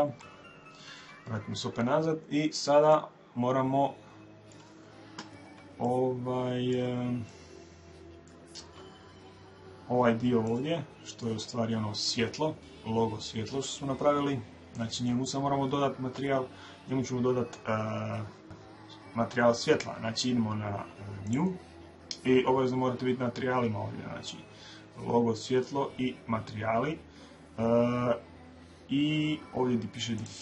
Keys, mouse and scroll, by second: 0.0 Escape, 2.3-5.5 middle drag, 5.7-10.4 middle drag, 10.4-12.2 right drag, 20.9 click, 29.8 click.